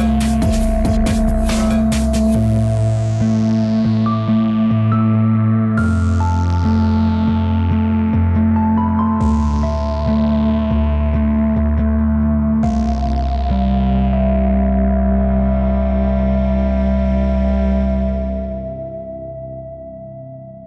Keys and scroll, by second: 0.2 Delete, 2.5 Delete.